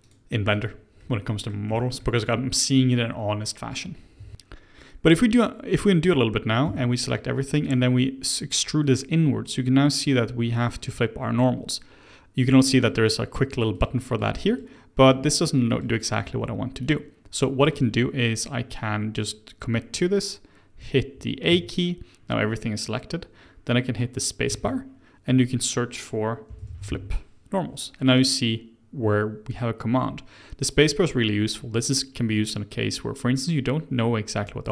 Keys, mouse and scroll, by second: 1.0-4.2 middle drag, 4.2 Tab, 4.2 scroll, 4.3-4.7 scroll up 1, 6.6 a, 7.7 click, 12.8 click, 13.7 click, 14.1 click, 14.4 click, 15.0 click, 15.7 click, 16.8 click, 17.7 click, 19.1 click, 21.1 w, 21.5 a, 24.5 space.